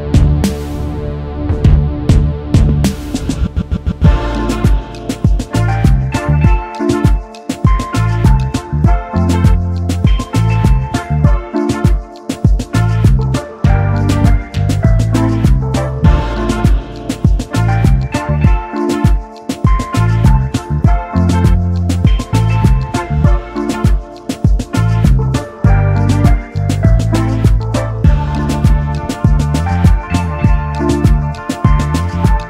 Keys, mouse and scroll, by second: 1.9 double click, 3.1 alt+shift+click, 10.8-13.2 scroll up 1, 14.3 Down, 16.1-16.8 alt+scroll down 1, 17.6-18.0 alt+scroll up 1, 19.2 alt+scroll down 1, 19.8 alt+scroll up 1, 22.7 double click, 24.2 ctrl+x, 24.5 ctrl+f, 25.8 double click, 28.0 typing, 30.3 typing, 32.0 shift+click.